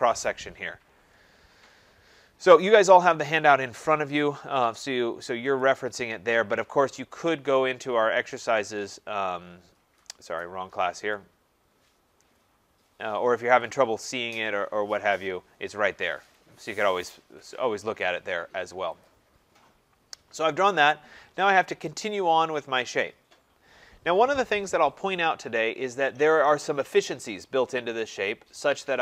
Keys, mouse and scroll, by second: 3.6 click, 5.7 click, 11.2 click, 13.8 click, 14.9 middle click, 14.9 middle click, 16.4 click, 19.1 click.